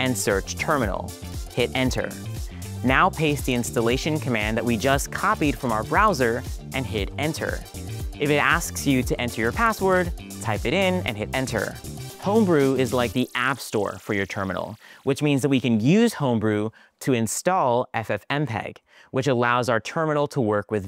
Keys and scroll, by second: 1.8 Return, 3.1 super+v, 6.9 Return, 11.1 Return.